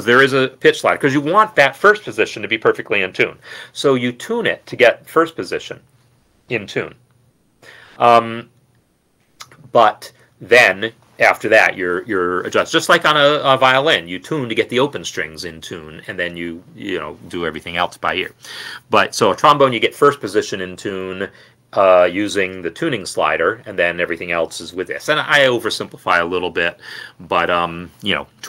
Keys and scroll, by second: 26.5 f.